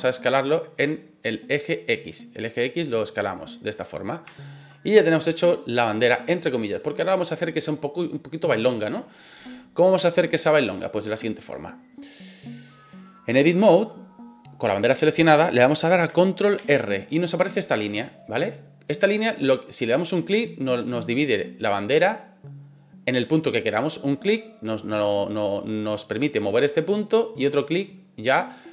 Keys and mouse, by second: 4.3 shift+middle click, 4.8-5.8 middle drag, 11.0 middle click, 16.5 ctrl+r, 27.4 click, 27.8 middle click.